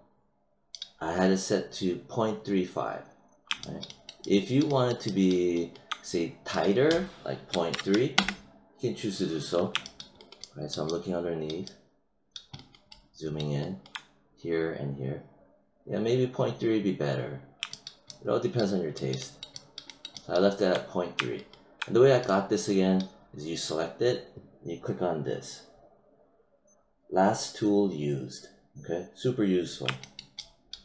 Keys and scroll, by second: 7.4 ., 8.1 Return.